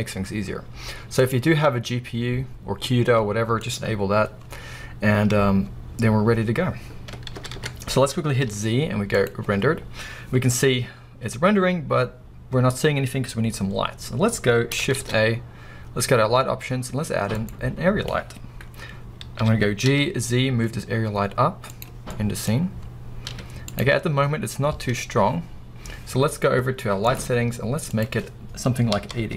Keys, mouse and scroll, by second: 1.2 click, 7.4 ctrl+s, 7.4-9.5 drag, 8.1 scroll down 1, 8.5 z, 10.9 scroll up 2, 14.9 shift+a, 18.2-19.3 scroll down 2, 19.3 g, 21.7 click, 22.2-27.0 middle drag, 23.4 z, 27.0 click, 27.9-29.3 drag.